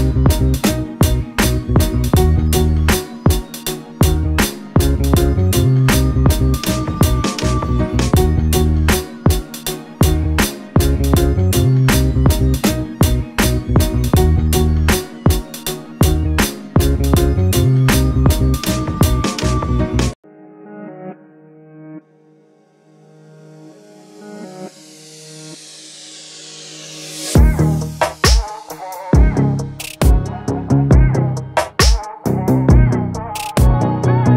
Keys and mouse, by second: 3.8-5.0 drag, 7.0-8.1 drag, 9.0 click, 32.1-33.9 drag.